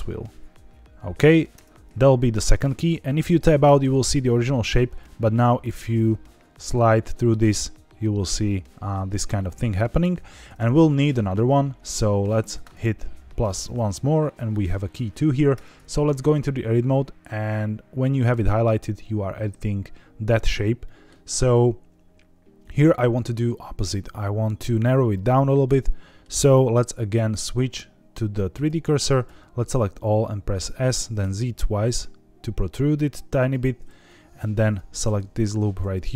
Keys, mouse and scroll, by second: 0.7 click, 1.5 Tab, 2.2-2.8 middle drag, 4.9-10.0 drag, 12.5 click, 15.5 Tab, 20.8 middle click, 25.6 middle click, 27.2-28.6 drag, 29.2 a, 30.5 s, 30.9 z, 31.1 z, 33.3 click, 34.5 alt+click, 35.7 s.